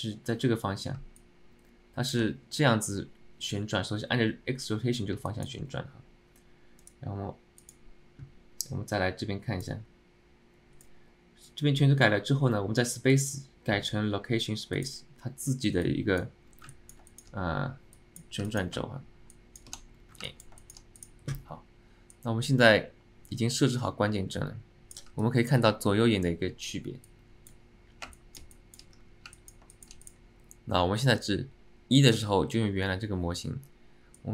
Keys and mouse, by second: 1.3-2.2 alt+middle drag, 5.4 alt+middle click, 16.8 click, 17.2 shift+click, 18.6 click, 19.5 shift+click, 20.3 alt+middle click, 20.7 alt+shift+middle drag, 21.1 click, 22.3-25.6 drag, 25.3 alt+middle click, 28.4 click, 28.6 click, 29.4 alt+middle click, 29.8 alt+shift+middle drag, 30.1 click, 31.4 click.